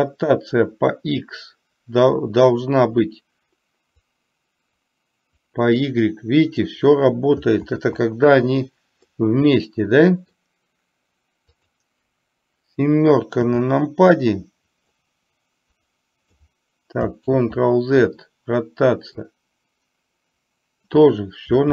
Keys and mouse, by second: 4.1-6.8 drag, 7.8 ctrl+z, 9.2-10.4 middle drag, 11.6 click, 15.1-16.4 drag, 17.3 ctrl+z, 19.3-20.9 drag.